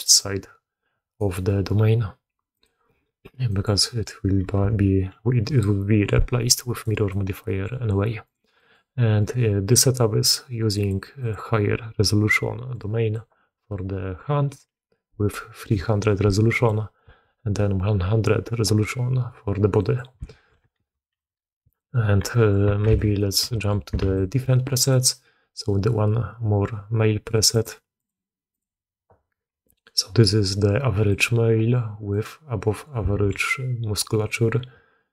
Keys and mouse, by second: 0.0 d, 0.0 d, 0.1-1.1 drag, 1.1 d, 2.5-3.6 drag, 4.5 alt+a, 6.7 click, 7.0-7.6 drag, 8.2 click, 8.5 click, 9.1 click, 12.6 click, 19.7 click, 20.2 alt+a, 20.7 alt+w, 22.2 drag, 22.8 n, 23.1 drag, 23.4 shift+drag, 23.9 alt+a, 24.0-24.8 drag, 27.5 click, 27.9 click, 28.5-29.7 drag, 31.1-32.0 drag, 32.0-32.8 middle drag, 33.1 alt+a.